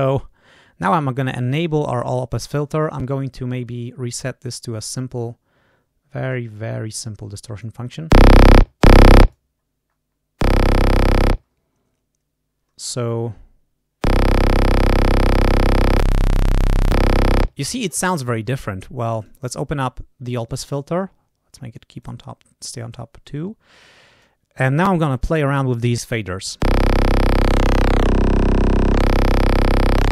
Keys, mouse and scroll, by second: 1.4 click, 4.3 click, 6.2-7.7 drag, 9.2 click, 9.5-10.1 scroll down 1, 15.8 click, 16.7 click, 19.0 click, 20.2 click, 20.6 right click, 21.9 click, 22.8-24.3 drag, 27.0-28.3 drag, 28.8 click, 29.8-30.1 drag.